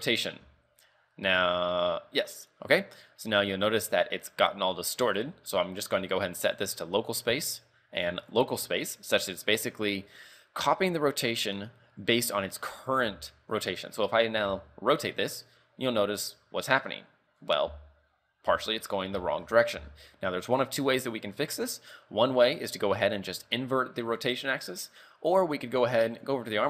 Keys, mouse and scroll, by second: 6.0 click, 7.5 click, 13.1 z, 13.7 right click, 14.6 r, 17.8 z, 18.6 z, 19.3 shift+middle click, 19.9 z, 20.3 middle click, 20.8 scroll up 3, 21.0 middle click, 22.5 right click, 24.1-24.4 scroll down 3, 24.4 middle click, 25.1 right click, 26.3 click.